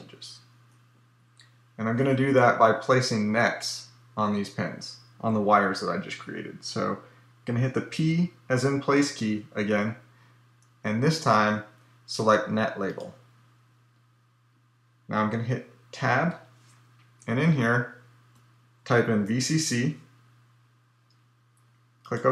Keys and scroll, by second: 7.6 p, 15.8 Tab.